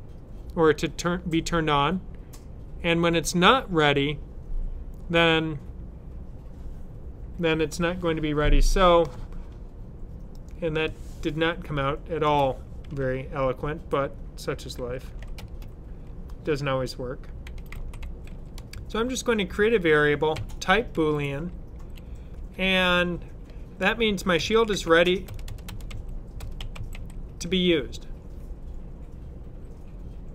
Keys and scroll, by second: 14.5-15.6 typing, 17.2-18.8 typing, 20.2-20.8 typing, 22.3 typing, 24.0-27.7 typing.